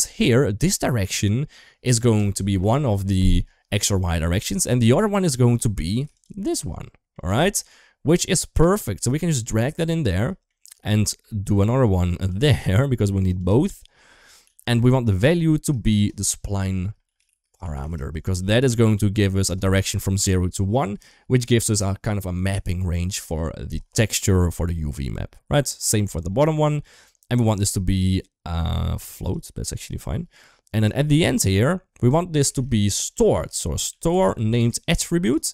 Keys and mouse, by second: 0.1 middle drag, 6.6-6.9 middle drag, 7.2 shift+middle click, 8.3 click, 8.8-9.6 drag, 10.2 middle click, 11.2 shift+d, 13.1 click, 13.2 g, 14.2 g, 15.4 shift+middle click, 15.7-19.4 drag, 25.6-26.9 drag, 27.4-29.2 drag, 29.8 middle click, 31.2 middle click, 32.3 shift+a, 35.3 middle click.